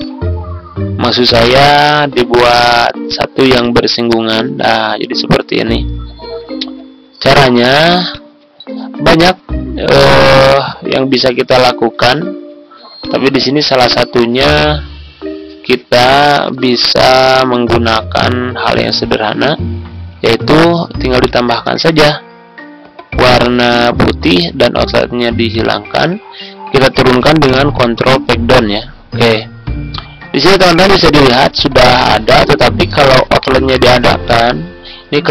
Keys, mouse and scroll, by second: 6.0-6.4 ctrl+scroll down 1, 7.1 click, 9.4 ctrl+Down, 9.6 ctrl+Down, 9.7 ctrl+Down, 12.9-16.4 drag, 16.4 Right, 16.5 Right, 17.0 Right, 18.0 typing, 21.2 click, 24.3 right click, 25.5-26.5 drag, 28.0 ctrl+Page_Down, 33.4 right click, 34.2 click.